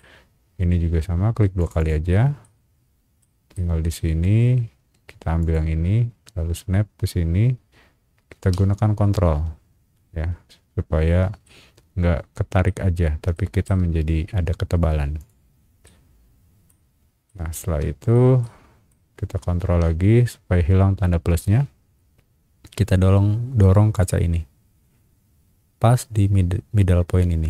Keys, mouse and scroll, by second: 1.6 click, 1.8 click, 2.4 middle click, 3.5 middle click, 5.4 click, 11.4-12.6 ctrl+middle drag, 13.3 shift+middle click, 15.2 shift+click, 15.8 shift+middle click, 17.0 scroll down 1, 17.3 shift+middle click, 18.4 shift+middle click, 19.1 scroll down 1, 20.9 scroll down 1, 23.9 click, 25.4 scroll up 1.